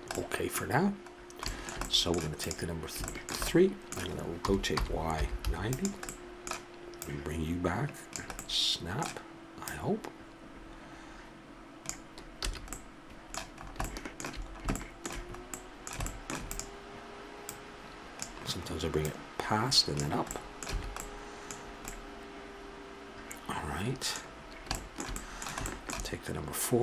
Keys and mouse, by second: 2.4-4.3 right drag, 4.4 r, 7.0-8.4 drag, 8.4-8.8 middle drag, 9.7-11.4 drag, 12.4 a, 12.7-14.5 middle drag, 16.5-18.1 middle drag, 18.1-20.3 drag, 20.3 middle click, 20.7 a, 23.8-24.6 middle drag.